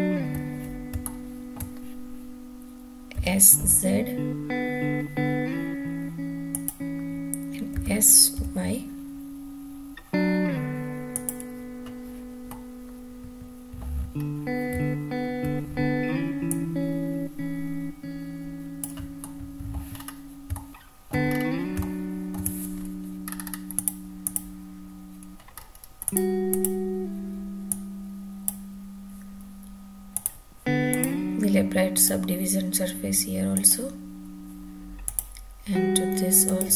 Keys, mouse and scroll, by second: 1.0-1.5 shift+middle drag, 3.1 s, 3.6 z, 6.5 click, 7.8 s, 8.4 y, 11.1 click, 12.5-13.8 middle drag, 14.1-14.5 scroll up 1, 14.7 `, 16.5-18.8 drag, 19.2-19.7 middle drag, 19.9-20.5 scroll up 4, 20.5-21.1 shift+middle drag, 21.2-21.7 scroll up 2, 21.7-22.4 shift+middle drag, 23.2 scroll up 2, 23.8 click, 24.3 click, 25.6-26.0 scroll up 3, 26.0 drag, 26.5 click, 27.7-28.4 drag, 30.1 click, 30.9 click, 31.9-33.9 drag, 35.0 click, 36.4-36.7 drag.